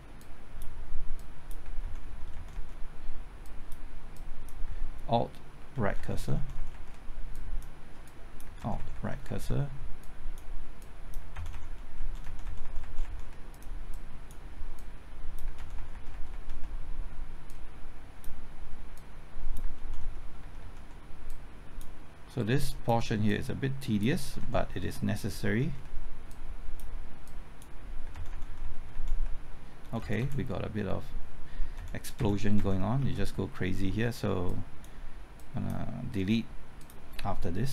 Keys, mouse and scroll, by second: 0.2 click, 1.8 alt+Right, 2.1 alt+Right, 2.3 alt+Right, 2.5 typing, 3.4 click, 4.6 typing, 5.7 alt+Right, 6.0-6.6 typing, 6.4 alt+Right, 7.3 click, 8.4 typing, 8.6 alt+Right, 8.8 alt+Right, 8.9 alt+Right, 9.1 alt+Right, 9.3 alt+Right, 10.0 click, 10.8 click, 11.3 alt+Right, 11.5 alt+Right, 11.7 alt+Right, 12.0 alt+Right, 12.2 alt+Right, 13.0 alt+Right, 13.5-15.4 drag, 15.6 alt+Right, 16.1 alt+Right, 17.5-19.6 drag, 19.6 typing, 19.8 alt+Right, 20.0 alt+Right, 20.2 alt+Right, 20.4 alt+Right, 20.6 alt+Right, 21.3 click, 24.1-24.9 typing, 24.2 alt+Right, 24.4 alt+Right, 26.3 click, 28.0-28.8 typing, 29.9 Left, 31.8 Right, 32.6 Right, 33.0 Left, 34.5-37.7 drag.